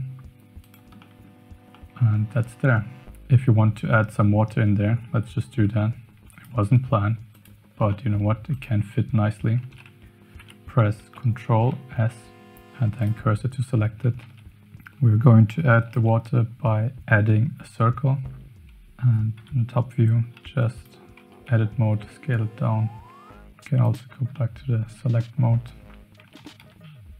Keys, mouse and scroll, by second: 1.1 middle click, 1.4 Tab, 1.8-2.1 middle drag, 5.6 z, 7.3 click, 8.0 middle click, 8.5 click, 9.6 shift+a, 11.0 shift+s, 14.2 shift+a, 14.6 x, 16.1 shift+a, 19.4 KP_7, 20.3 s, 21.2 Tab, 21.4 s, 23.8 click, 24.3 middle click, 26.2 Tab, 26.4 g.